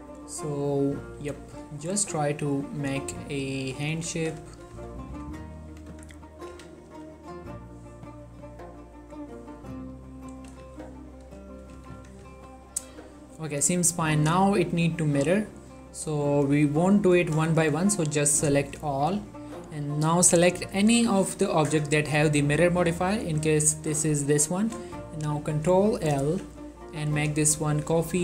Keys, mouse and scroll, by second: 1.3 1, 1.8-2.2 ctrl+middle drag, 3.0 ctrl+scroll down 1, 3.2 ctrl+middle click, 4.1 click, 4.3 z, 4.6 shift+middle click, 5.5 ctrl+middle click, 6.0 Tab, 6.5 click, 6.6 z, 7.0 g, 7.9 z, 8.4-9.0 scroll up 1, 9.0-10.1 drag, 10.1-10.6 scroll down 1, 10.6 z, 11.5 shift+middle click, 11.9 z, 12.1 Tab, 12.4-14.1 ctrl+middle drag, 14.1-14.5 drag, 14.5 middle click, 15.1-16.4 ctrl+middle drag, 16.4 click, 17.4 middle click, 17.7-20.8 shift+drag, 21.7-22.9 shift+drag, 26.3 ctrl+l, 28.0-28.2 drag.